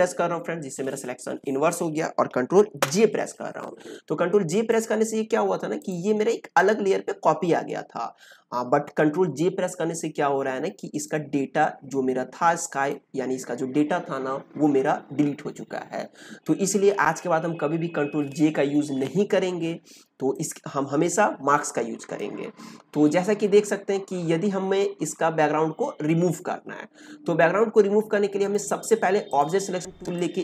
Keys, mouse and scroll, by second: 2.8 ctrl+j, 4.6-20.3 drag, 20.3-24.3 drag, 28.4 right click, 29.2-30.4 drag.